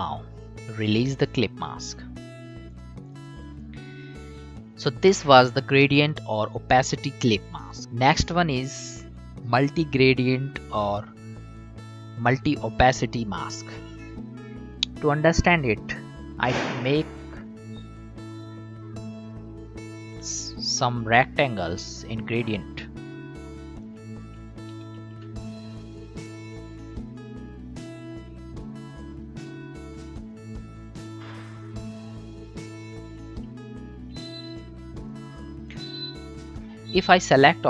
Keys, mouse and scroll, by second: 1.0 click, 7.8 click, 15.4 click, 21.9-24.7 alt+drag, 24.7 ctrl+d, 25.4-27.2 drag, 27.2-34.1 alt+drag, 34.1 ctrl+d, 35.1-37.6 drag.